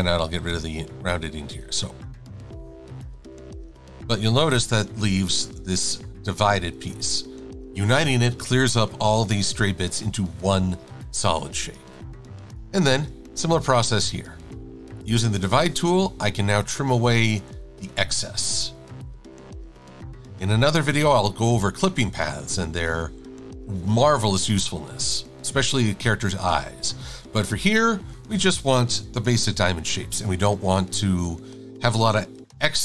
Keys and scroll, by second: 2.8-3.8 typing, 10.8 v, 14.9 shift+super+a, 18.6 Delete, 20.0 Delete, 21.2 Delete, 21.6 Delete, 22.4 Delete, 24.5 Delete, 27.3 Delete, 27.5 Delete, 29.1 super+-, 29.6 super+-.